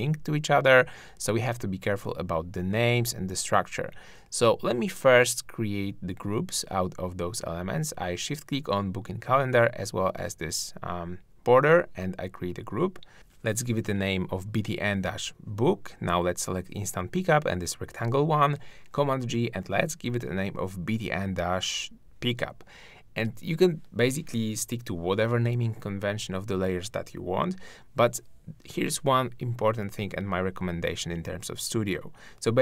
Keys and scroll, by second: 9.0 super+g, 17.6 shift+super+g, 18.7 super+r, 28.3 shift+super+g.